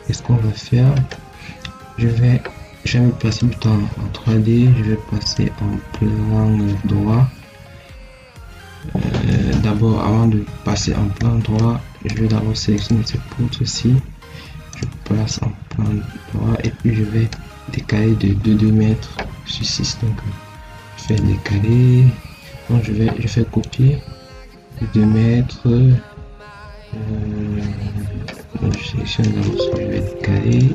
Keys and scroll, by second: 29.3 shift+1, 29.8 Escape.